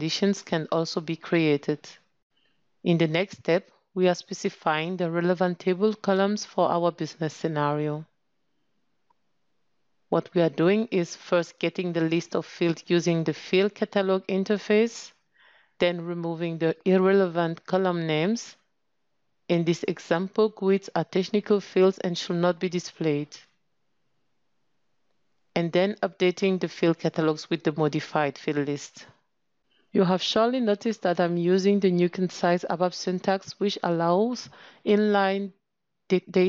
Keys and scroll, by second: 18.3 shift+F1, 34.6 ctrl+shift+<, 35.9 ctrl+space.